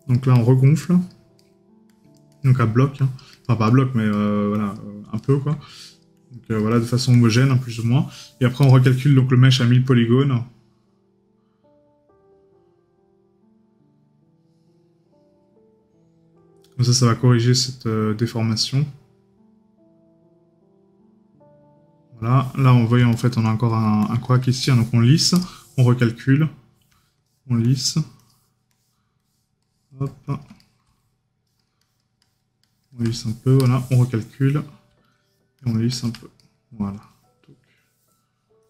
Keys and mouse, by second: 1.4 right click, 3.7 right click, 30.7 right click.